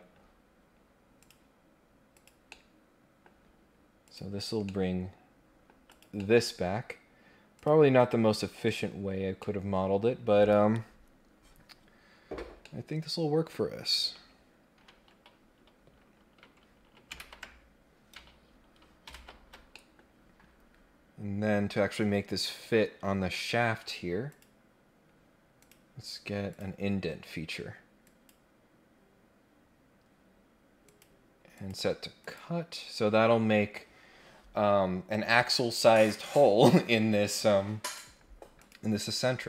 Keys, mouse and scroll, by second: 1.1 click, 2.1 click, 2.5 middle click, 4.0 click, 4.6-5.6 middle drag, 5.8 click, 6.2 middle click, 7.5 click, 8.6 click, 9.3 scroll down 1, 9.3 middle click, 10.4 click, 12.6 middle click, 19.1 shift+Tab, 19.7 middle click, 24.2 click, 25.5 click, 26.5 click, 28.0 click, 30.8 click, 31.5 click, 32.2 click, 38.5 click.